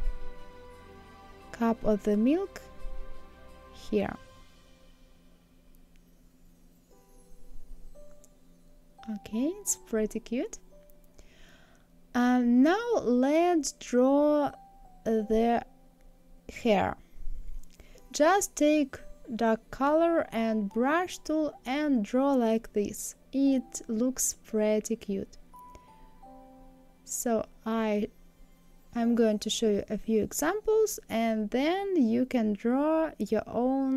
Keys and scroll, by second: 4.3 Right, 6.0 Left.